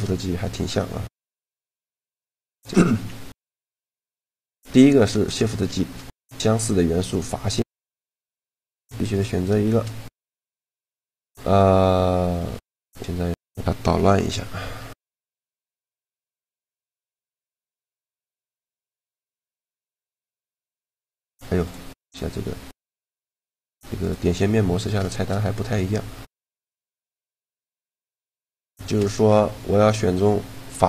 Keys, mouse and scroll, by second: 1.8 Tab, 2.6 a, 3.0 a, 3.6 shift+g, 5.5 shift+g, 8.3-9.9 drag, 8.8-9.9 right drag, 9.3 shift+g, 10.2 right click, 12.2 a, 12.6-14.2 right drag, 13.5 ctrl+l, 14.6 r, 17.3 a, 17.4-19.3 right drag, 17.8 shift+g, 19.5 shift+g, 23.7-25.4 drag, 24.8 shift+g, 25.8 a, 26.4 shift+g, 27.8 right click.